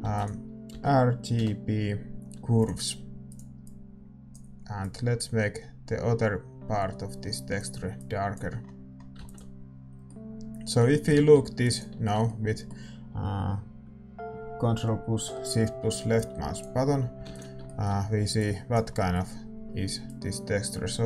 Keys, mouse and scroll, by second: 9.4 ctrl+s, 20.1 ctrl+s.